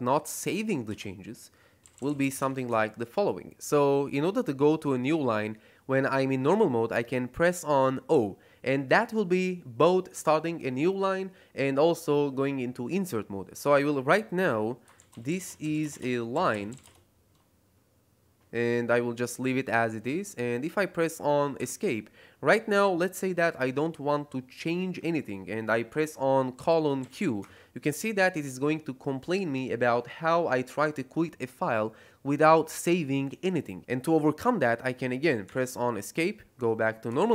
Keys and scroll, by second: 0.0-2.7 typing, 8.0 o, 14.6-17.2 typing, 21.5 Escape, 26.5 shift+;, 26.9 q, 27.3 Return, 35.3 Escape, 37.1 shift+;.